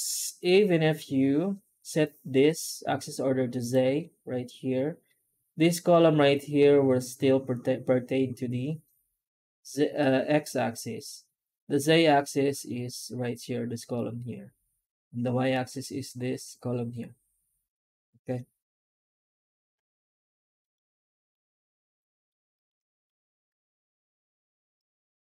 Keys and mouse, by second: 21.7-22.1 middle drag, 22.4 shift+middle drag, 22.7 middle click, 23.3 F9.